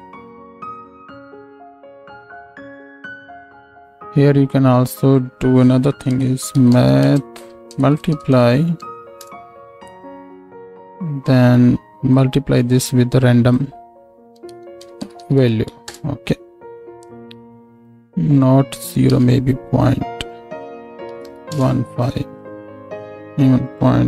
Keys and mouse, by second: 2.4 ctrl+space, 10.4 click, 17.1 click.